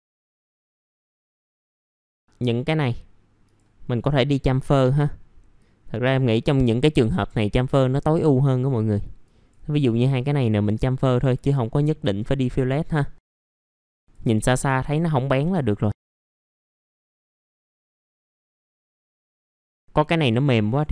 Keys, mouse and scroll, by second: 0.0 click, 0.9 middle click, 1.0 scroll down 1, 1.2 middle click, 1.4-2.2 scroll up 1, 2.2-3.3 drag, 3.8-5.4 scroll up 1, 5.6 click, 6.3 scroll down 1, 6.6 middle click, 7.1-9.2 scroll up 1, 9.2-11.3 drag, 11.4 middle click, 11.8-12.2 scroll down 1, 12.2 middle click, 12.7-13.2 scroll up 1, 13.2 ctrl+click, 13.7 click, 14.3-14.6 scroll down 1, 14.6 middle click, 15.6-15.9 scroll up 1, 15.9 click, 16.5 scroll down 1, 16.6 middle click, 16.8-17.4 scroll up 2, 16.8 middle click, 17.4 middle click, 17.7 click, 18.0 middle click, 18.3 click, 18.7 scroll down 1, 18.8 middle click, 19.1 scroll up 1, 19.4 middle click, 19.7 middle click, 19.7 scroll down 1.